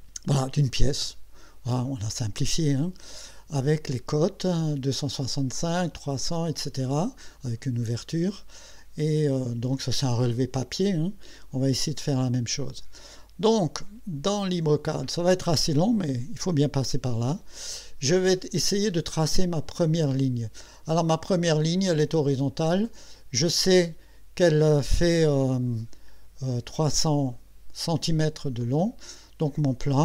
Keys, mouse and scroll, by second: 14.3 click, 22.1 click, 25.8 click, 28.6 click.